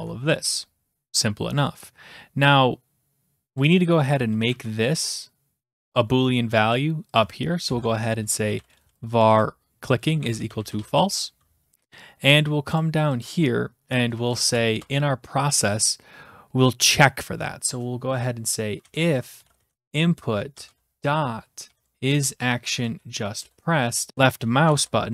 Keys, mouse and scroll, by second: 0.0 Tab, 0.6 click, 3.6 click, 3.7 click, 4.5 ctrl+c, 5.8-7.2 scroll, 7.2 click, 7.7 Return, 8.3-11.3 typing, 9.3 ctrl+v, 11.7 click, 11.8 click, 11.9 click, 12.0-12.8 scroll down 4, 12.8 click, 13.2 click, 14.2 Return, 14.4 BackSpace, 14.7 BackSpace, 18.6-22.9 typing, 23.4 Return, 24.1 Right, 24.6 typing, 24.7 Return.